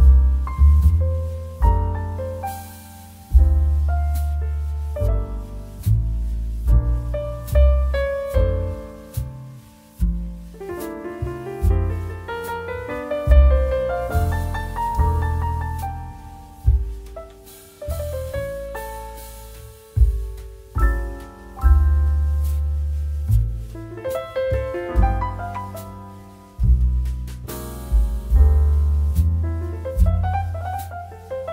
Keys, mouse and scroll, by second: 0.2 click, 0.8 Delete, 10.0 Tab, 12.1 ctrl+a, 13.8 right click.